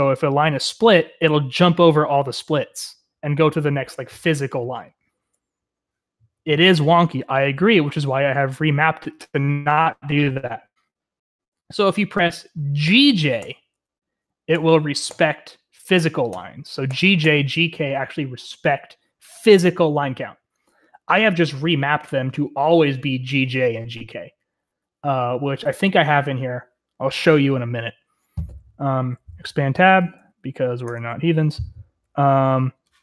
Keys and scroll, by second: 7.7 typing, 13.9-14.8 typing, 16.1-17.0 typing, 28.8-30.4 typing, 30.4 Up, 31.0 Up, 32.5 Return.